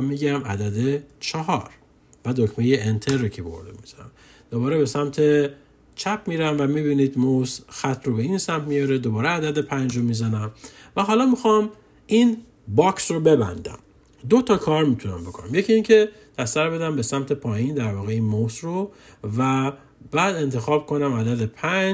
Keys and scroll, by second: 0.8 4, 2.8 Return, 9.4 5, 10.8 5, 11.3 Return, 13.2 Return.